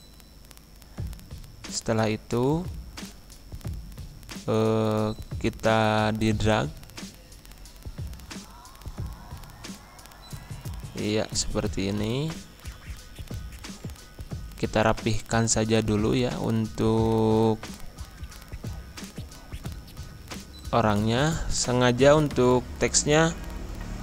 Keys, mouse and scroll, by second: 1.2 F4, 1.9-8.7 drag, 9.0 scroll up 1, 10.1-11.3 scroll down 1, 11.3 click, 13.8 ctrl+z, 14.7-17.3 alt+drag, 17.3 ctrl+Home, 19.4 ctrl+z, 20.1 click, 22.5 ctrl+Page_Up.